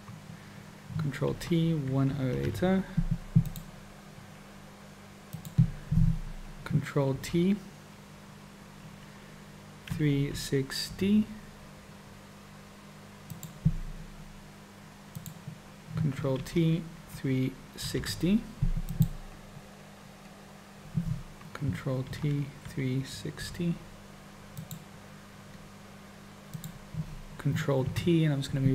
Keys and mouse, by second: 1.3 ctrl+t, 5.3 click, 7.1 ctrl+t, 15.0 click, 16.4 ctrl+t, 22.1 ctrl+t, 26.4 click, 27.9 ctrl+t.